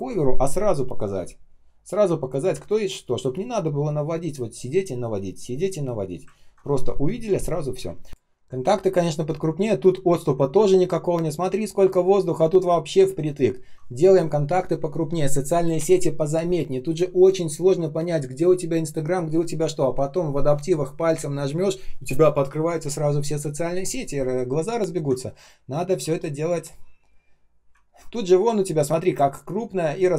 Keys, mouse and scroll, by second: 2.4 space, 6.3 ctrl+scroll down 1, 7.7 ctrl+scroll up 1, 14.5 shift+0, 25.2-26.0 ctrl+scroll down 1, 26.0 space, 26.5 space, 27.7 ctrl+scroll up 1.